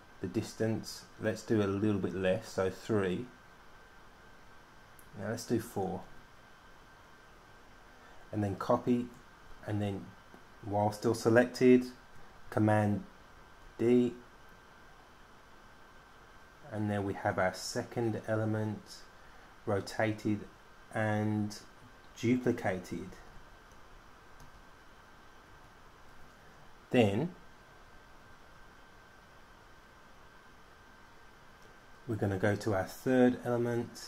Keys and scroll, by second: 2.6 3, 6.3 4, 13.2 super+d, 13.9 super+d, 14.3 super+d, 14.5 super+d, 14.5 super+d, 14.6 super+d, 14.9 super+d, 15.2 super+d, 15.3 super+d, 15.6 super+d, 16.1 super+d, 16.2 super+d, 16.5 super+d, 16.9 super+d, 17.4 super+d, 17.6 super+d, 18.0 super+d, 18.5 super+d, 18.9 super+d, 19.7 super+d, 20.3 super+d, 22.4 super+d, 24.7 super+d, 26.3 super+d.